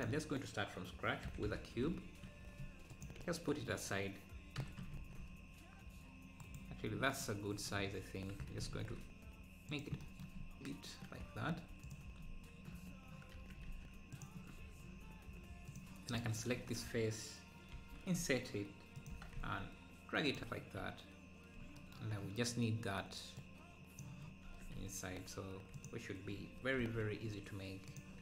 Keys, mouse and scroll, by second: 0.0 shift+a, 1.3 g, 3.2 KP_Decimal, 3.6 scroll down 5, 4.6 s, 6.9-7.3 scroll down 4, 7.6-8.4 scroll up 1, 8.4 s, 10.4-10.9 scroll up 1, 10.9 Tab, 11.9 click, 12.2 scroll up 1, 13.3 Tab, 14.2 ctrl+a, 14.5 Tab, 15.7 click, 17.7 typing, 19.1 g, 19.1 g, 20.6 Tab, 20.6 scroll down 1, 23.4-24.8 drag, 24.8 Tab, 25.9 click, 26.8 |.